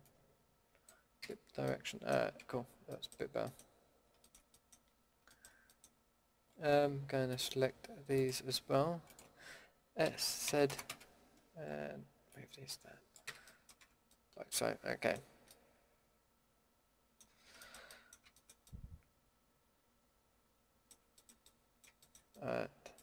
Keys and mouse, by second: 1.2 a, 2.4 Tab, 3.2 Tab, 10.0 s, 13.2 a, 13.4 click, 13.8 Tab, 18.7 middle drag, 20.1 middle click, 20.5-20.8 middle drag, 21.1-21.9 middle drag.